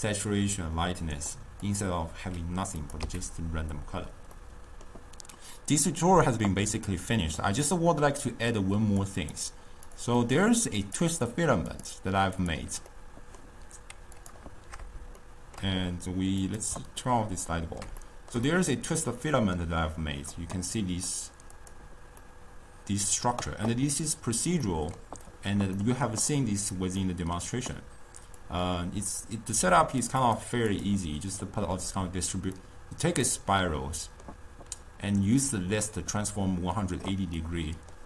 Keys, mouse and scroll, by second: 1.8 click, 2.9 click, 3.5 x, 4.5 middle click, 8.6 click, 9.3 click, 9.9 click, 10.3 drag, 11.8 click, 12.4 click, 13.0-14.3 middle drag, 14.3 click, 15.3-16.5 shift+middle drag, 16.5 click, 17.0-21.6 ctrl+middle drag, 21.6 click, 22.3-26.4 middle drag, 26.4-27.1 scroll down 2, 27.1-28.5 middle drag, 28.5-30.9 drag, 32.6 click, 33.7-36.7 middle drag, 37.4-38.0 middle drag.